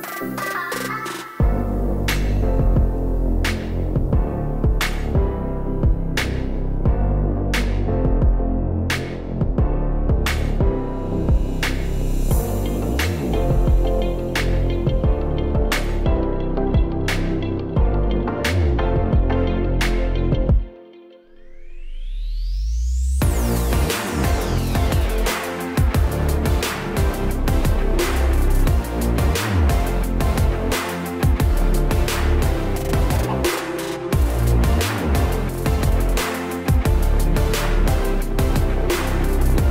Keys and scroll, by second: 4.0 Right, 26.0 super+d, 28.7 d.